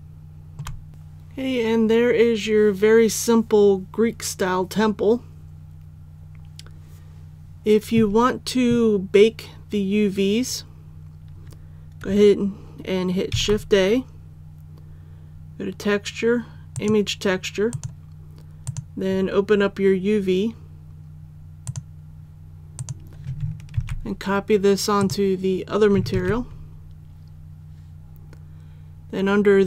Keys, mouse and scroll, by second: 0.9 middle click, 13.3 shift+a, 16.7 click, 23.8 ctrl+c, 25.0 click, 26.1 ctrl+v.